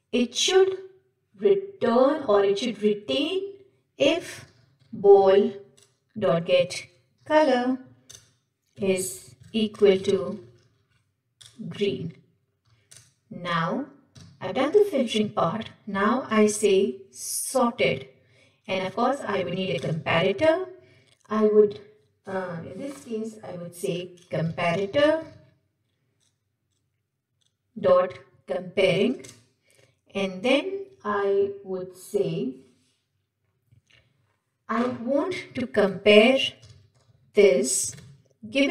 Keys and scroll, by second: 8.1 Return, 19.8 Return, 29.9 Return.